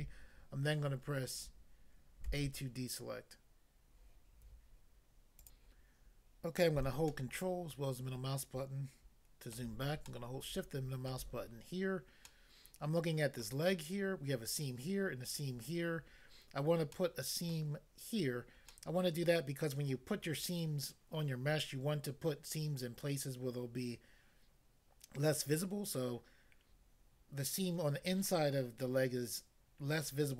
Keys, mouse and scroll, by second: 2.3 a, 5.4 click, 5.6 click, 7.2 ctrl+middle click, 10.0 shift+middle click, 13.4 middle click, 16.9 middle click, 17.5 middle click, 18.6 middle click, 19.6 middle click.